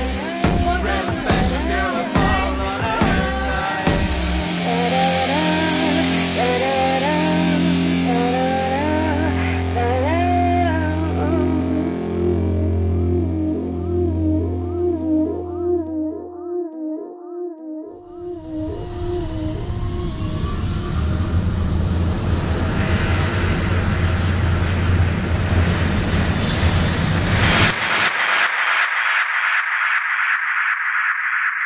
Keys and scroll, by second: 5.9 super+z, 10.8 super+Return, 19.6 ], 23.1 v, 27.9 alt+j.